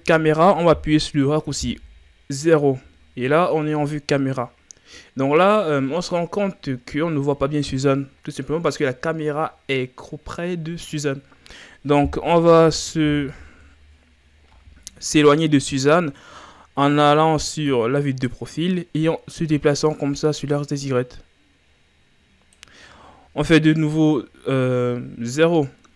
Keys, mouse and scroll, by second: 1.6 KP_0, 13.1 KP_3, 16.2-16.5 scroll up 2, 16.9 ctrl+scroll up 3, 17.6-17.9 scroll up 1, 20.8-24.0 drag, 24.0 KP_0.